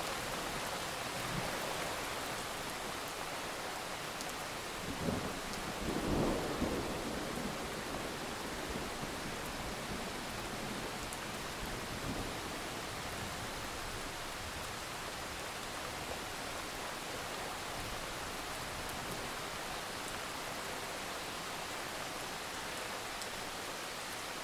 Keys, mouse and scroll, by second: 2.6-3.4 ctrl+scroll up 1, 3.7-4.4 alt+scroll up 1, 4.4 click, 6.2 alt+scroll down 1, 6.4 click, 6.8-7.5 scroll up 1, 7.5 click, 7.8-8.3 alt+scroll up 1, 8.3 click, 12.3-12.9 scroll up 1, 12.9 click, 16.0 click, 16.2 alt+scroll down 1, 16.4 alt+click, 18.1 click, 18.7 alt+scroll up 1, 18.9 click, 20.0 shift+click, 20.2 right click, 20.9 click, 21.2-22.6 alt+scroll down 1, 22.6 click, 22.8 alt+scroll up 1, 23.3 click.